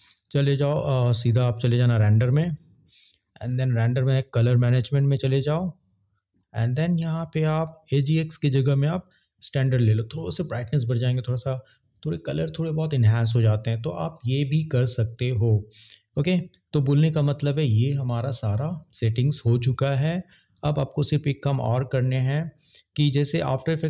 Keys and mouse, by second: 4.8 click, 8.2-9.3 drag, 20.5 click.